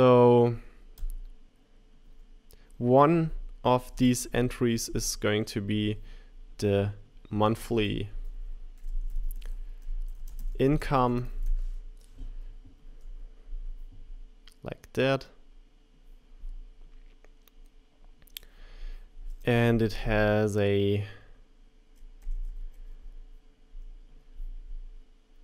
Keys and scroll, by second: 19.9 super+c, 20.5 super+v, 21.5 shift+Right.